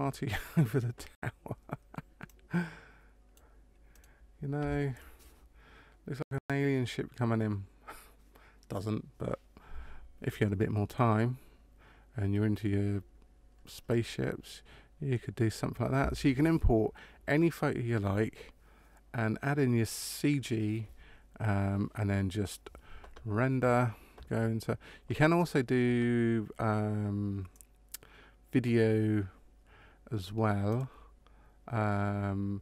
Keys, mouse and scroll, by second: 2.3 click, 4.0 right click, 30.6 click.